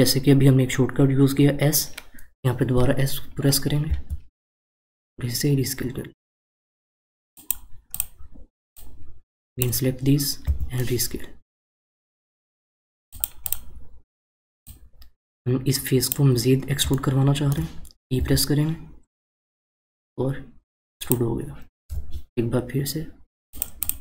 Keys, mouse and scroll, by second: 7.9 click, 8.7 click, 10.4 s, 13.4 click, 14.7 click, 16.9-18.2 shift+middle drag, 18.2 e, 23.8 click.